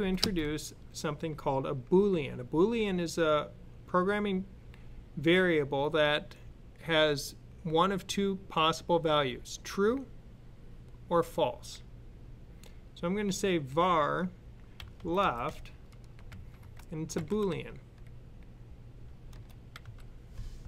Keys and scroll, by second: 14.4-17.4 typing, 19.5-20.2 typing.